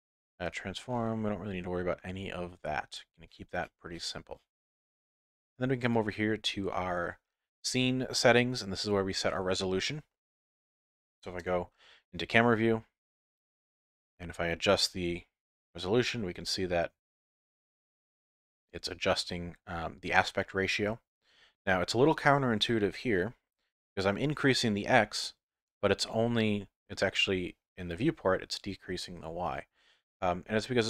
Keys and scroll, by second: 11.4 KP_0.